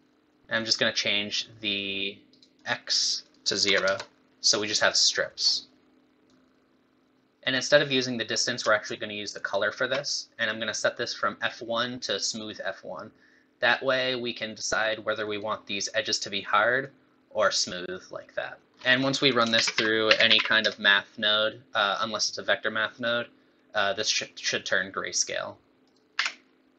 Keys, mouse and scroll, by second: 1.7 click, 2.5 click, 3.2 click, 3.3 click, 5.4-6.2 scroll up 3, 6.3 click, 7.3 ctrl+shift+click, 9.3 ctrl+shift+click, 10.9 click, 14.9 click, 16.8 click, 18.7 middle click, 18.7 scroll up 3, 18.7-19.3 scroll down 3, 19.3 click, 19.5 shift+a, 25.8 click.